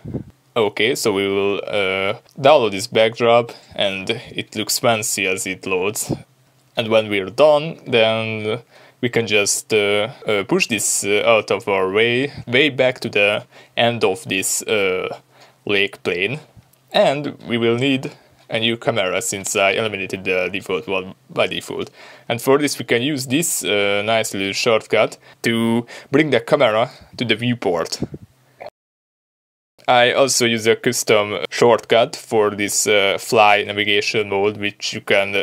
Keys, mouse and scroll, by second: 0.0-7.6 drag, 7.6-11.0 middle drag, 10.8 scroll down 2, 11.0 click, 11.5-14.7 middle drag, 12.5 scroll up 2, 13.4 g, 14.7 click, 14.8-16.5 middle drag, 15.3 g, 16.5 click, 16.9-19.8 middle drag, 22.3 shift+a, 25.2-26.9 middle drag, 25.5 ctrl+alt+KP_0, 28.3 middle click, 28.6 click, 28.8 g, 30.5-35.4 drag.